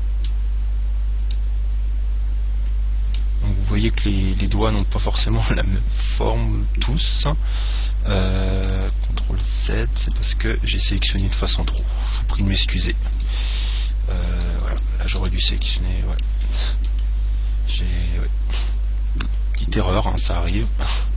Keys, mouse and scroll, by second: 1.0-3.5 middle drag, 5.2-6.9 middle drag, 9.8 ctrl+z, 10.3 ctrl+z, 10.8 ctrl+z, 11.2 ctrl+z, 11.5 ctrl+z, 12.0 ctrl+z, 12.3 ctrl+z, 12.8 ctrl+z, 13.1 ctrl+z, 13.4 ctrl+z, 14.1-16.8 right drag, 15.6-17.3 middle drag, 17.2 KP_7, 18.8 e, 20.9 click.